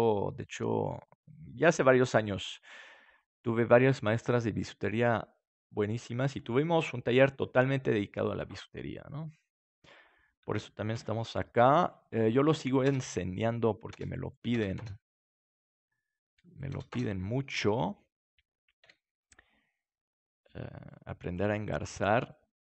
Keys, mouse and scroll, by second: 8.9-10.7 right drag, 10.9 shift+d, 11.7-19.5 drag, 15.2-17.4 right drag, 15.6 middle click, 16.5-18.1 middle drag, 18.1 right click, 18.8 KP_7, 19.5 right click, 19.7-21.6 drag, 21.3 right click, 21.6 right click, 22.1-22.6 drag, 22.2 right click.